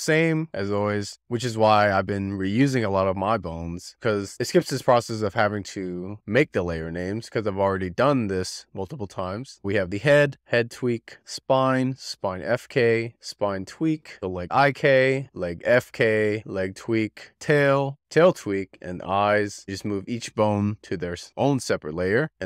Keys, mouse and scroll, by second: 0.2-0.9 scroll down 3, 9.6 scroll down 3, 9.7 click, 10.3 BackSpace, 10.4 click, 11.1 click, 11.7 BackSpace, 11.9 click, 12.4 BackSpace, 13.0 click, 14.0 click, 14.2 BackSpace, 15.1 BackSpace, 15.2-17.0 drag, 17.1 click, 17.3 click, 18.0 click, 18.7 click, 20.1-22.4 drag.